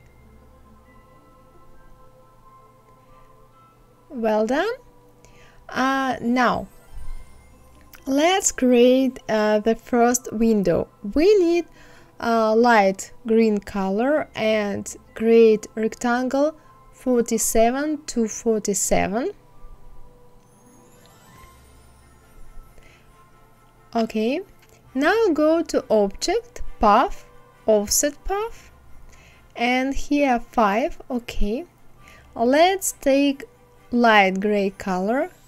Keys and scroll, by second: 13.4 KP_4, 13.9 KP_7.